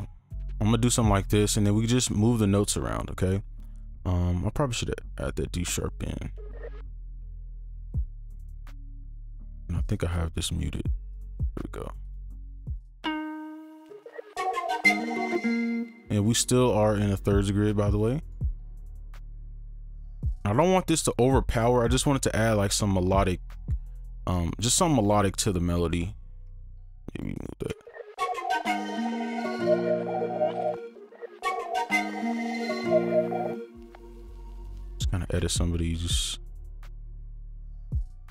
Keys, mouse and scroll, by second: 1.4 right click, 6.6 space, 8.5 double click, 11.1 right click, 13.8 space, 15.3 space, 18.2 right click, 19.3-21.6 scroll up 1, 21.6 right click, 24.3 ctrl+2, 24.5 ctrl+click, 25.2 right click, 26.5 ctrl+click, 27.3 right click, 27.7 space, 30.7 space, 33.5 space, 34.2 click, 35.7 click, 37.5 alt+click.